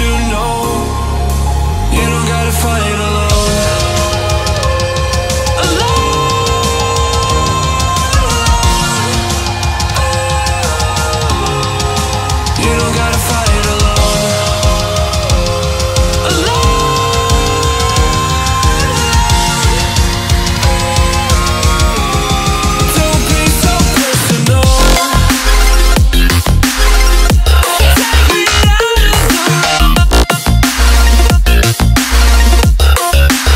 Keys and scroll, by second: 5.8 alt+a, 14.1 alt+a, 20.2 alt+a, 24.5 alt+a, 27.6 alt+a, 30.4 alt+a.